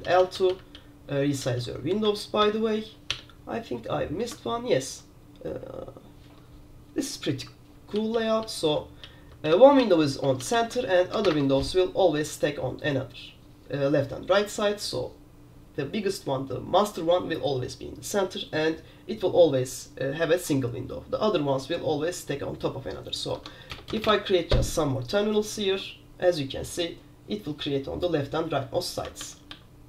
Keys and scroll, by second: 0.0 super+h, 0.3 super+h, 0.5 super+h, 0.6 super+h, 0.8-1.2 super+l, 1.5 super+h, 1.7 super+h, 2.2 alt+9, 2.5 alt+8, 3.2 alt+7, 4.7 super+g, 5.0 super+k, 5.7 super+g, 8.1 super+l, 8.2 super+l, 8.7 super+h, 9.2 super+l, 9.3 super+l, 9.6 super+l, 9.9 h, 10.7 super+h, 11.3 super+Return, 23.4 Escape, 23.8 super+Return, 24.0 super+Return, 29.3 super+q, 29.6 super+q.